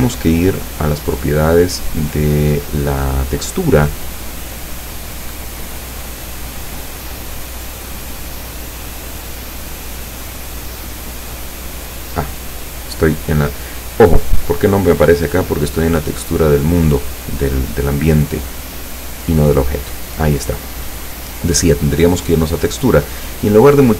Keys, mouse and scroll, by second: 0.1 scroll up 1, 0.9-1.7 scroll up 2, 2.2 right click, 7.6 click, 8.3 click, 10.0 click, 10.9 click, 19.2 click, 20.2-21.4 scroll down 6.